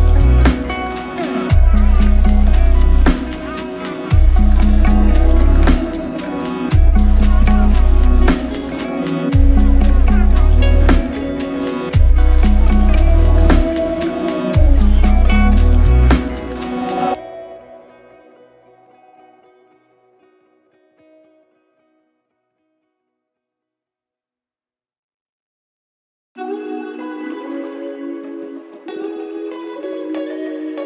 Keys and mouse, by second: 1.3 double click, 10.5 ctrl+click, 11.9 double click, 14.2-15.5 typing, 16.9 double click, 21.2 alt+click, 24.2 alt+click.